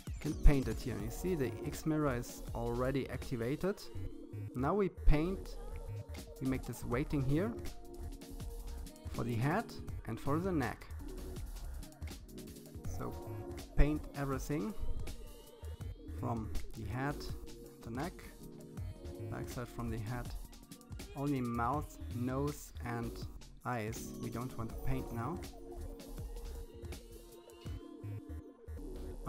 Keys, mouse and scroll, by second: 0.9-2.7 drag, 6.4 KP_3, 7.2-8.2 drag, 12.1-12.4 scroll down 4, 12.4 middle click, 12.9 click, 14.1 KP_3, 14.3 click, 14.8 click, 15.0 KP_1, 15.2 click, 15.4 KP_3, 16.0 click, 19.2 KP_3, 19.3 shift+middle click, 19.5 click, 21.3 shift+middle click, 21.5 f, 21.8 click, 23.0 shift+middle click, 23.2 f, 23.4 click, 27.6 middle click, 27.9 click.